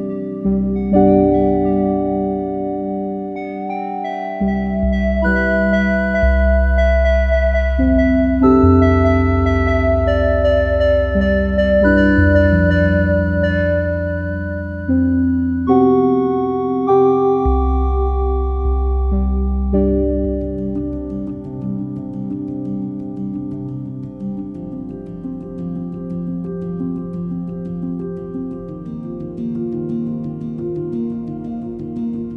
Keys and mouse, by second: 0.0-0.7 typing, 0.1-1.5 drag, 0.3 Tab, 0.7 right click, 1.5 ctrl+a, 1.5 middle click, 2.1 Tab, 2.3 2, 2.4-3.5 drag, 3.5 ctrl+z, 3.5 x, 4.7 click, 4.7 g, 5.3 click, 5.9 click, 5.9-9.1 typing, 6.3 Tab, 6.9 click, 7.3 Tab, 7.7 click, 8.1 click, 8.3 middle click, 8.6 click, 9.7 click, 10.2 click, 10.8 click, 11.0 ctrl+t, 11.2 click, 11.8 click, 12.2-13.2 drag, 13.2 x, 13.4 click, 13.4 q, 14.2 ctrl+s, 14.4 click, 15.1-17.1 typing, 15.3 ctrl+a, 15.5 Tab, 15.5 click, 16.4 Tab, 16.6 click, 17.5 ctrl+s.